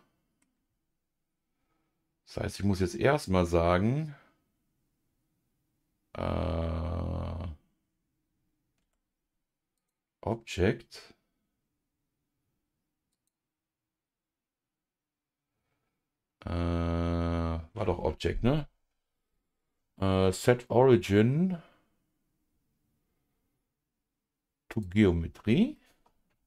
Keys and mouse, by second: 8.8 Tab, 9.8-24.8 drag, 25.7-26.4 middle drag.